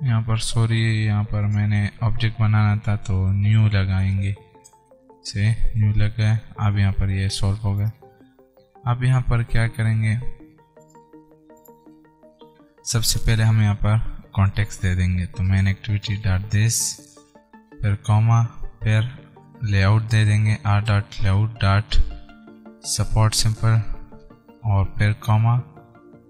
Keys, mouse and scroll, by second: 1.7 click, 3.0-4.8 typing, 4.4 Return, 8.2 click, 13.4 Right, 14.5-17.4 typing, 17.1 Return, 19.7 shift+r, 20.0 ., 21.2 Return, 21.5 ., 23.4 Return, 25.7 ,.